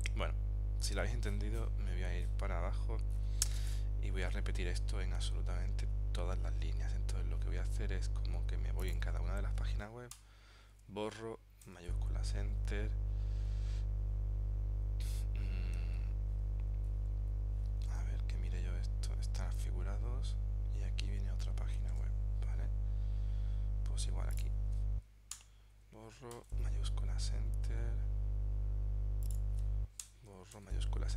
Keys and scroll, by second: 11.8 shift+Return, 18.0 super+End, 22.0 super+Tab, 26.4 shift+Return, 30.6 shift+Return.